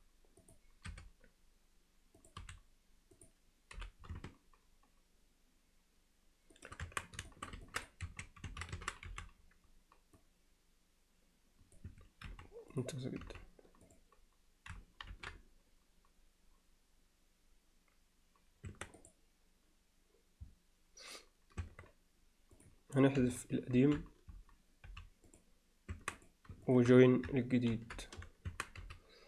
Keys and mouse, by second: 0.9 r, 2.4 s, 3.8 g, 6.9 Tab, 7.3 alt+shift+middle drag, 7.7 ctrl+alt+middle click, 8.1 1, 8.5 a, 9.1 c, 12.3 x, 13.3 z, 13.9 click, 15.1 ctrl+l, 18.7 Tab, 19.0 click, 21.6 Tab, 23.8 ctrl+l, 24.9 x, 25.9 Tab, 26.2 click, 26.7 shift+click, 27.8 ctrl+j, 28.5 Tab, 28.8 z.